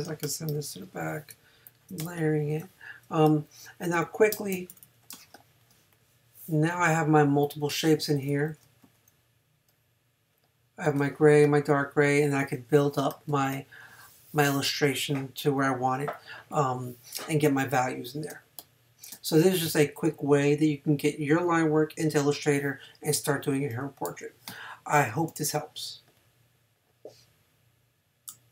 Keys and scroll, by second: 0.5 shift+super+[, 4.9 super+-, 8.8 v, 13.3 space, 18.3 space.